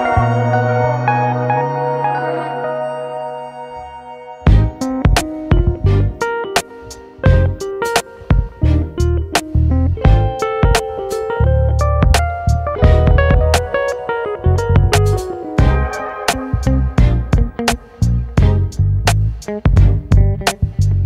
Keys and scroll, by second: 15.0 space.